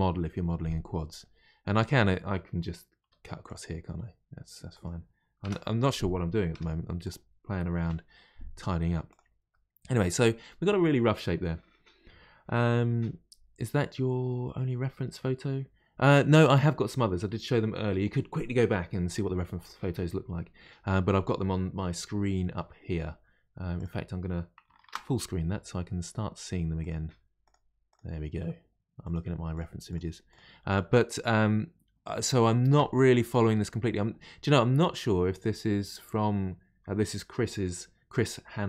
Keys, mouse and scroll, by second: 3.0 k, 6.5 2, 7.0 click, 7.8 Delete, 9.5-12.6 middle drag.